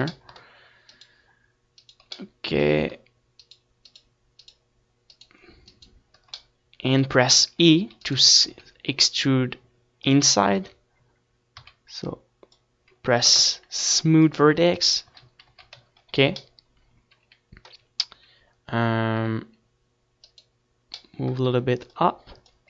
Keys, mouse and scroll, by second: 10.9 middle click, 11.9 KP_7, 12.8 z, 13.3 Tab, 14.0-15.8 drag, 14.2 a, 16.7-22.6 middle drag, 17.6-21.3 right drag.